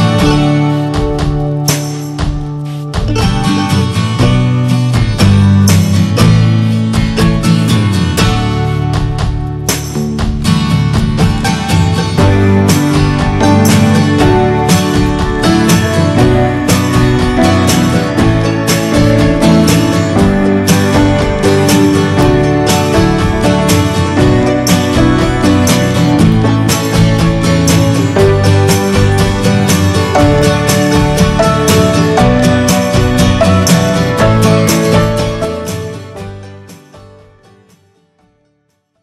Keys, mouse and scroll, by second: 1.4 scroll down 3, 1.6 shift+middle drag, 2.1 middle drag, 2.3 scroll up 3, 2.5-3.9 middle drag, 3.9 scroll down 4, 4.3-4.9 shift+middle drag, 4.9 ctrl+space, 5.4 shift+middle click, 5.5 scroll up 1, 6.2 click, 7.3 click, 7.6 click, 7.9 shift+middle drag, 8.2 scroll down 1, 8.4-9.6 shift+middle drag, 9.6 Tab, 9.9 Tab, 10.4 drag, 10.7-11.7 middle drag, 11.7 click, 12.5 shift+middle click, 12.6 scroll up 1, 12.8 drag, 13.0 middle click, 13.7-14.0 scroll up 1, 14.0-17.2 shift+middle drag, 17.5-18.0 middle drag, 19.1 shift+middle click, 19.3 scroll up 2, 19.5-20.0 middle drag, 20.0 scroll up 1, 20.2 middle click, 20.5 Tab, 21.1 Tab, 21.5 drag, 21.8 alt+z, 22.3 alt+z, 22.8 drag, 23.2 alt+z, 23.2 alt+z, 23.6 scroll down 1, 23.8-24.5 middle drag, 24.5 scroll up 1, 24.6 scroll down 1, 24.7-25.9 middle drag, 25.9 click, 26.6-28.4 middle drag, 28.4 click, 28.6-31.4 shift+middle drag, 31.4 ctrl+s, 31.7 scroll up 1, 31.9-32.9 middle drag, 32.9-33.9 scroll up 4, 33.3 shift+middle drag, 33.9-35.0 middle drag, 35.0 scroll down 3, 35.3 middle click, 35.8-37.5 middle drag, 37.5 scroll up 1, 37.8-39.0 middle drag.